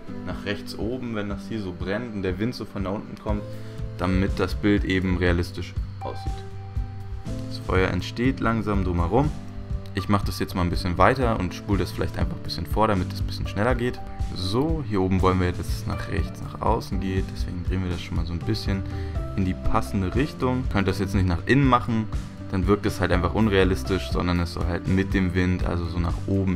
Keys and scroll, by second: 10.4 Return, 10.6 v, 14.4 Return, 14.8 super+j, 15.0 super+z, 15.5 Left, 15.5 v, 18.6 Return, 19.2 x, 19.8 x, 20.0 x, 20.7 super+z, 21.0 super+z, 22.7-25.3 typing, 22.8 super+z, 26.3 x.